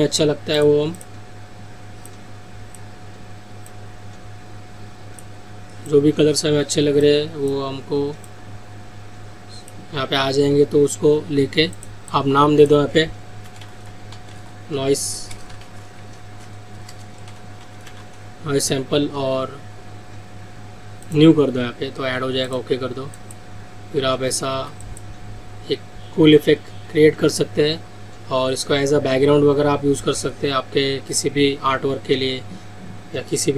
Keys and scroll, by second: 24.5 ctrl+z.